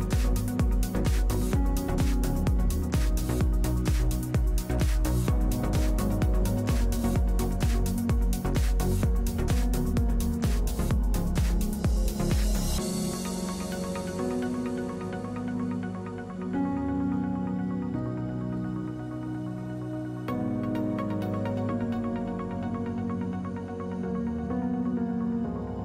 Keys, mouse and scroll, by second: 6.3 KP_7, 6.6 middle click, 7.0-8.1 drag, 10.8-12.0 drag, 11.3 w, 11.7 KP_Divide, 12.8 a, 20.0 middle click, 20.4 middle click, 21.0-22.1 middle drag, 21.0 w.